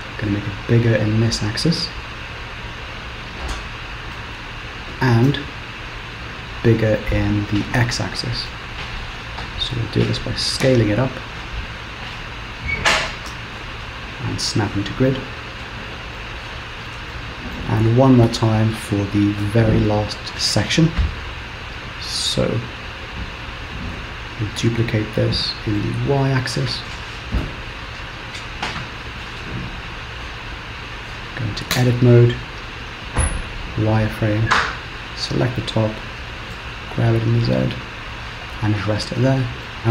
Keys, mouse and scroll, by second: 0.3 g, 4.2 KP_7, 5.3 a, 5.8 s, 8.6 s, 13.7 shift+s, 15.7-16.2 scroll down 2, 16.2 middle click, 16.8 scroll down 1, 17.2 shift+middle click, 18.3 KP_1, 19.5 KP_3, 20.1 scroll up 2, 20.8-21.3 scroll up 2, 24.5 shift+d, 31.8 Tab, 33.0 z, 34.5 click, 36.1 g, 39.3 Tab, 39.8 middle click.